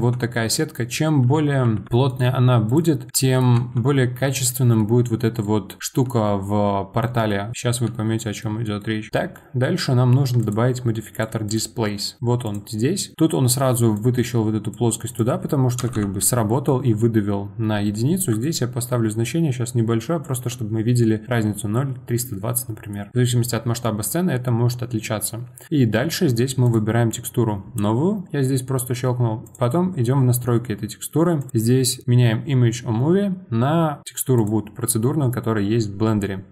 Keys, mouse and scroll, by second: 0.3-1.6 middle drag, 1.6 Tab, 1.9 a, 2.1 right click, 3.5 Tab, 4.2-7.8 middle drag, 7.8 z, 8.4-10.4 middle drag, 10.4 click, 11.1 click, 11.5-13.1 drag, 13.1 middle click, 13.9-18.1 drag, 18.4-21.3 shift+drag, 22.6-25.7 middle drag, 26.6-29.5 drag, 31.4-34.0 drag.